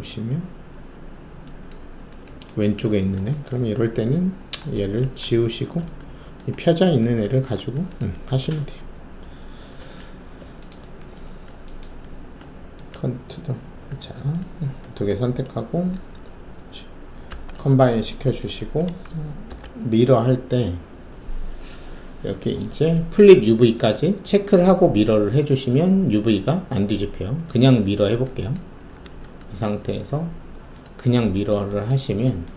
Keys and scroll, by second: 5.4 ctrl+alt+`, 17.2 shift+a, 19.4 ctrl+alt+e, 28.9 alt+w.